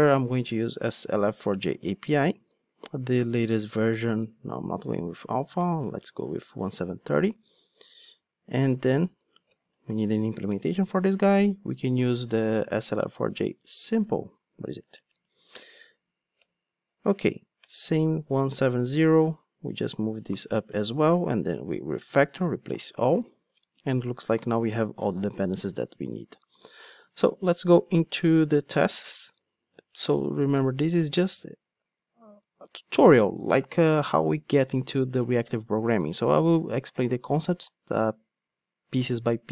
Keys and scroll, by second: 10.9 Return, 15.9 Return, 20.3 alt+super+v, 24.4 alt+super+l.